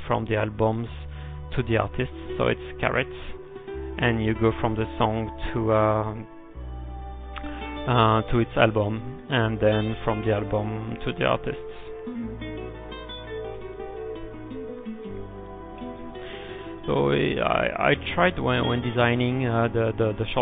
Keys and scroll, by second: 4.1-5.0 typing, 12.0-12.8 typing, 14.4 shift+6.